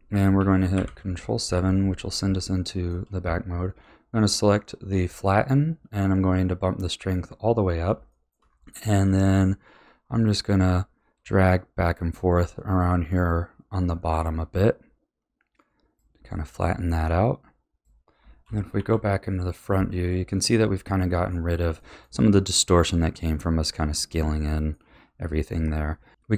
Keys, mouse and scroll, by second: 0.7 KP_7, 1.7-2.4 scroll up 3, 2.4-5.4 shift+middle drag, 6.9-8.1 scroll down 3, 8.1 shift+middle click, 8.5-8.8 scroll up 1, 8.8 click, 16.2 click, 18.7 KP_1, 19.6-25.9 middle drag.